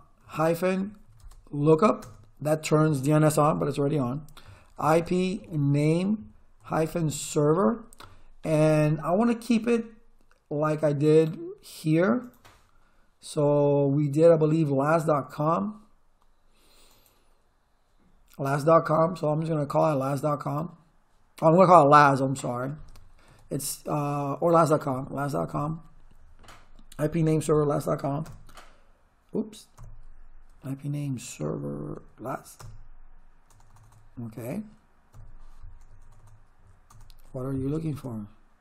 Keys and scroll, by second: 0.2-1.4 typing, 2.0 Return, 4.4-8.0 typing, 23.3 space, 24.6-26.2 typing, 28.2 Return, 29.8 Up, 31.4 BackSpace, 32.6 Return, 33.5 BackSpace, 35.1 Up, 36.0 BackSpace, 37.8 shift+/.